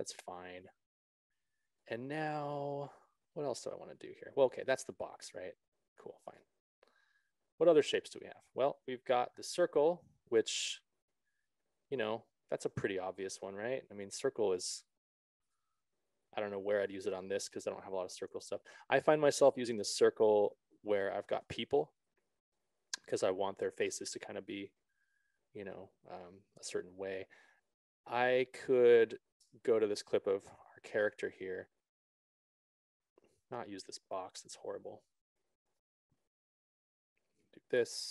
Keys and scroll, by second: 21.8 alt+s, 21.9 ctrl+z, 23.4 s, 27.1 ctrl+z, 29.8 BackSpace.